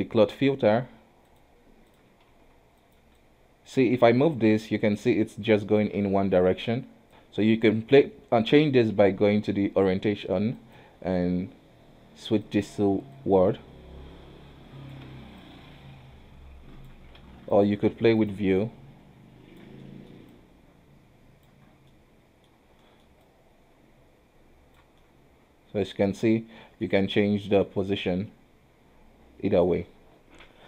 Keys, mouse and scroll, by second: 1.4-2.4 drag, 2.4 f, 3.3 click, 4.7 ctrl+z, 5.1 click, 6.1 ctrl+z, 6.5 click, 7.1 ctrl+z, 10.7-13.3 drag, 15.2 ctrl+z, 15.5 click, 17.3 ctrl+z, 17.6-18.8 drag, 19.9 middle click, 20.4 click, 21.8 scroll down 3, 22.0 middle click, 22.6-22.9 scroll down 1, 22.9 middle click, 23.3 click, 25.1-26.1 middle drag, 26.1-26.4 scroll up 2, 26.4 middle click, 27.0 scroll down 1, 27.4 middle click, 28.0 click.